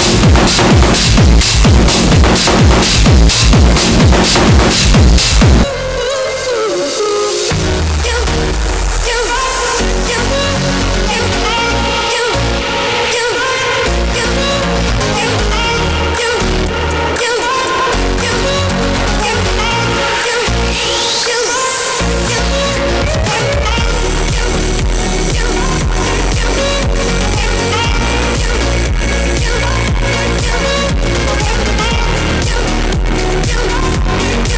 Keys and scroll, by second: 5.6 Page_Down.